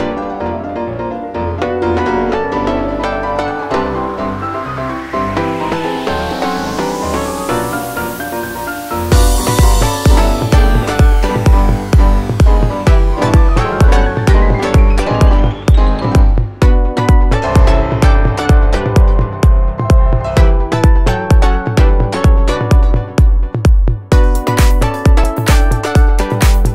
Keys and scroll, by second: 1.2 shift+F2, 1.4 shift+Page_Up, 1.6 F3, 5.7 F4, 5.9 Escape, 7.3 F3, 8.7 Escape, 9.5 alt+c, 9.6 alt+w, 9.9 p, 11.2 shift+F2, 11.3 F3, 13.6 F3, 14.4 alt+c, 14.5 alt+w, 14.9 p, 15.7 shift+F2, 15.8 F3, 19.5 F4, 20.5 alt+c, 20.5 alt+w, 21.0 p, 21.8 F2, 26.4 F3.